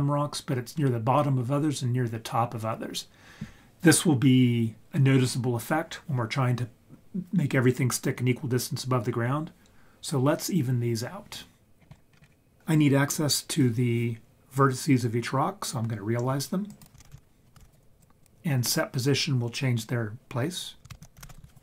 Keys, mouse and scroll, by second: 11.8 scroll down 4, 12.3 scroll up 7, 16.7 click, 17.0 shift+a, 21.0 shift+a.